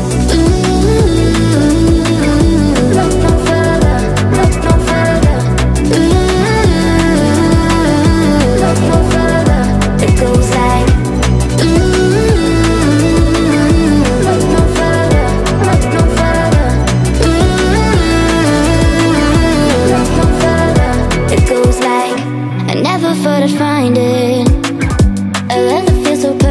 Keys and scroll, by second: 12.0 Delete.